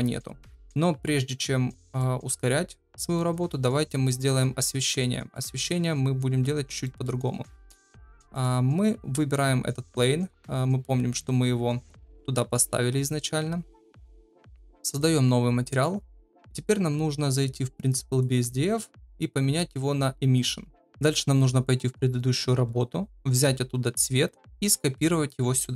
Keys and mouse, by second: 1.3-2.0 middle drag, 3.2 middle click, 4.7-5.0 shift+middle drag, 5.3 middle click, 6.8 shift+middle drag, 8.3 click, 15.0 click, 18.1-20.6 drag, 24.6 ctrl+v.